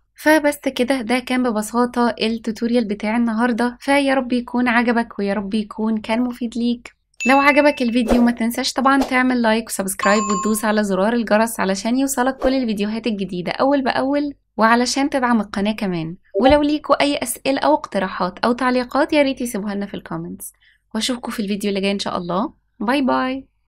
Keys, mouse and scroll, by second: 0.2 click, 0.3 g, 1.0 click, 1.8 ctrl+z, 2.2 s, 2.7 click, 2.8 r, 3.4 g, 4.6 s, 5.4 r, 6.0 ctrl+s, 6.0 click, 7.2 click, 7.3 click, 7.9 click, 8.1 ctrl+s, 8.3 click, 9.9 scroll down 3, 10.1 click, 10.8 g, 10.9 l, 11.3 click, 11.5 KP_0, 11.7 ctrl+z, 12.0-12.4 scroll down 9, 12.3 click, 12.5 click, 12.7 click, 12.9 click, 13.1 click, 13.3 click, 13.7 click, 13.9 click, 14.0 click, 14.1 click, 14.2 click, 14.6 click, 14.9 click, 15.2 click, 15.5 click, 15.9 ctrl+s, 16.3 scroll up 2, 16.4 scroll down 2, 16.5 scroll down 1, 16.9 click, 17.4 ctrl+s, 17.5 click, 20.5 ctrl+s, 20.7 click, 21.1-21.5 scroll up 5, 21.6 click, 21.7 click, 21.8 KP_0, 22.0 click, 23.6 click.